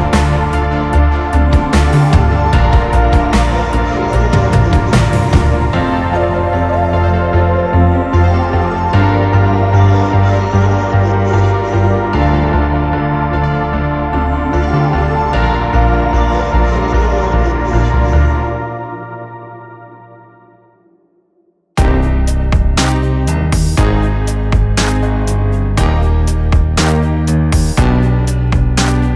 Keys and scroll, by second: 8.8 ctrl+z, 13.2 BackSpace, 13.7 ctrl+v, 15.5 Down, 20.8 Down, 21.1 Down, 21.4 Down, 22.0 Up, 23.0 BackSpace, 25.0 Down, 25.0 Right, 25.0 4, 25.5 6.